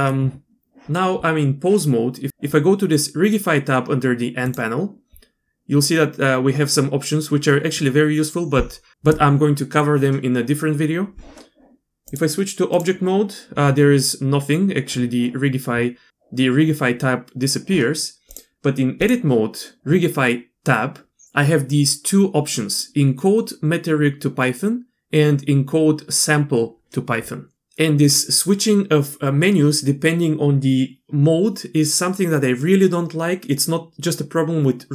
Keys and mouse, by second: 12.1-12.8 drag, 18.3-19.0 drag.